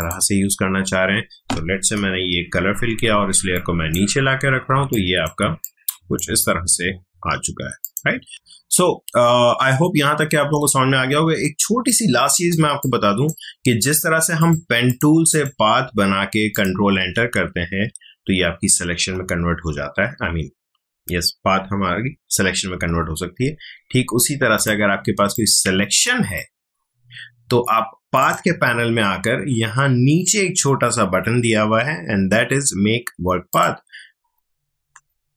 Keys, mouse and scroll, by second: 1.9 alt+BackSpace, 3.5 click, 4.5 space, 4.9-7.8 ctrl+drag, 11.3 space, 11.8-13.8 ctrl+drag, 19.0 ctrl+z, 19.7 ctrl+alt+z, 24.5-28.2 drag, 33.5 click.